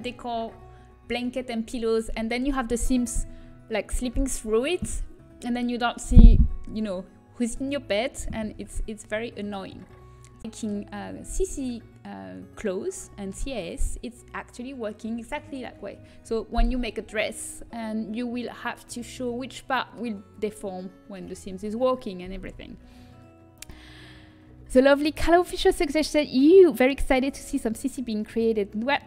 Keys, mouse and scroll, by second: 9.3-12.3 middle drag, 13.0-14.9 middle drag.